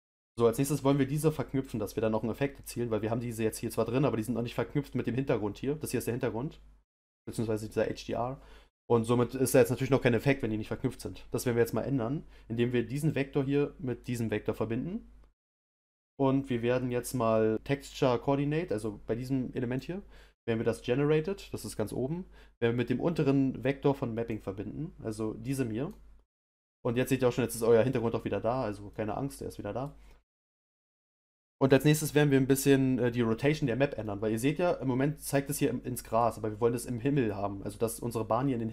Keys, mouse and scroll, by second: 14.0 click, 25.9-34.4 drag, 34.4-38.7 middle drag.